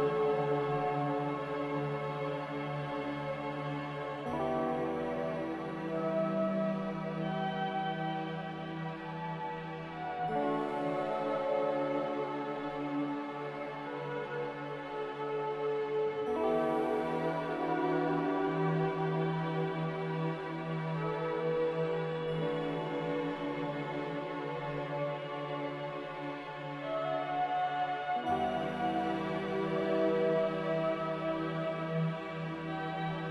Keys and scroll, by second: 16.0 q, 22.9-24.1 typing, 26.1 typing.